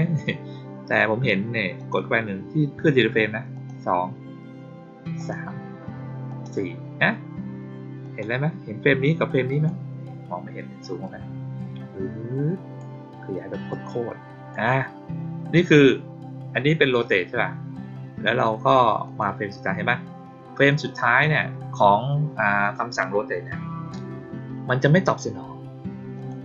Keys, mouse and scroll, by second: 1.7 click, 3.5 click, 5.1 click, 6.2 click, 7.9 click, 9.4 click, 11.0-12.7 drag, 13.6-14.4 drag, 19.0 click, 20.6 click, 26.1 click.